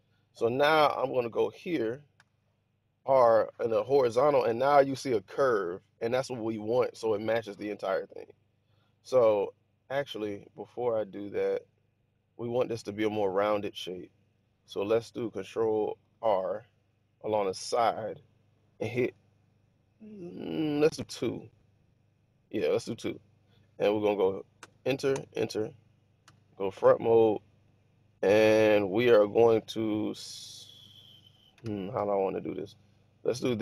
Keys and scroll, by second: 2.0 ctrl+r, 10.4 ⟲, 15.8 ctrl+r, 21.0 2, 24.5 Return, 25.1 Return, 26.1 1.